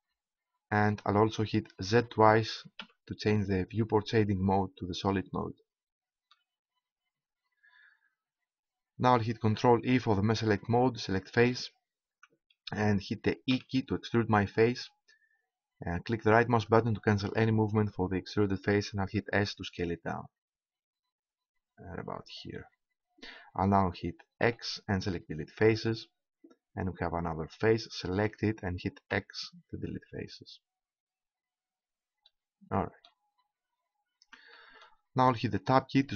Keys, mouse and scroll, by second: 0.8-2.7 drag, 2.1 z, 2.7 z, 9.4 ctrl+Tab, 13.5 e, 16.7-19.0 drag, 19.0 s, 22.3-23.7 drag, 24.4 x, 28.1-30.1 right drag, 29.1 x.